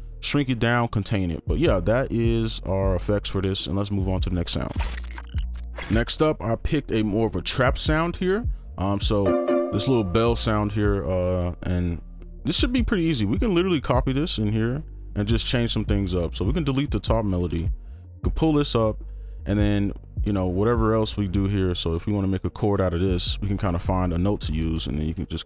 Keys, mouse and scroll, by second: 9.2-9.7 typing, 11.6 right click, 14.9 double click, 15.7-16.1 scroll down 1, 16.2-16.6 scroll up 1, 16.6 ctrl+click, 17.1 ctrl+Delete, 17.4 ctrl+a, 18.1 ctrl+Up, 19.0 right click, 21.7 ctrl+click, 22.0 shift+click, 22.6 shift+click, 23.4 right click, 24.4 ctrl+click, 24.6 shift+click, 25.2 ctrl+click.